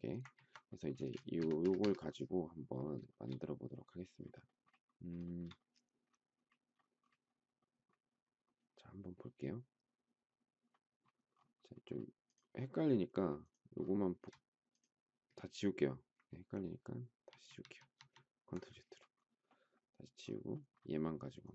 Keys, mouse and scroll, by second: 0.9 space, 1.4 Escape, 1.6 Escape, 3.1 shift+middle click, 5.2 shift+middle click, 13.3 shift+click, 13.6 shift+scroll down 1, 17.2 ctrl+z.